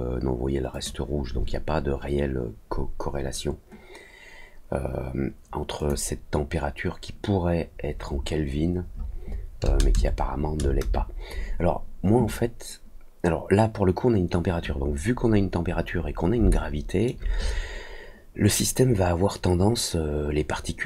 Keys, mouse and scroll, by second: 0.7 click, 5.7 click, 15.2 middle click, 15.2 scroll up 2, 15.5 middle click, 15.5-16.1 scroll down 4, 15.9 middle click, 16.4 alt+middle click, 17.4 scroll down 1.